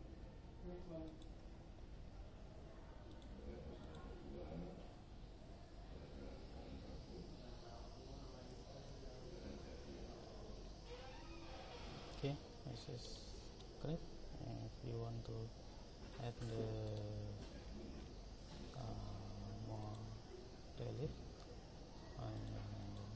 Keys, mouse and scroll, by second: 3.3 click, 7.0 Escape, 13.2-16.1 middle drag, 16.3 click, 16.5 click, 17.1 right click, 17.8 middle click, 21.6 click, 22.5 click.